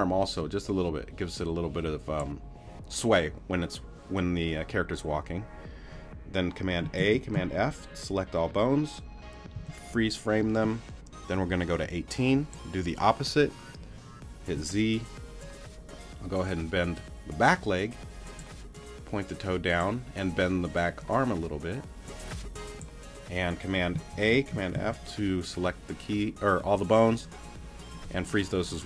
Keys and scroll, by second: 7.0 super+a, 9.5 super+f, 14.5 z, 24.1 super+a, 24.7 super+f.